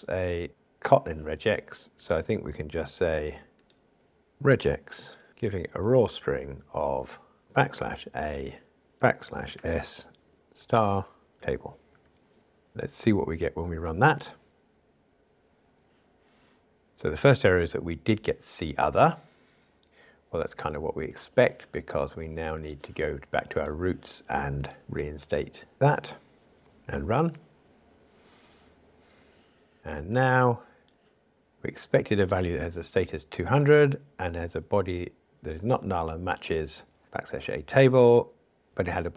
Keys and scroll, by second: 0.5 super+b, 5.3 Return, 14.5 ctrl+shift+r, 25.7 super+/, 27.0 ctrl+r.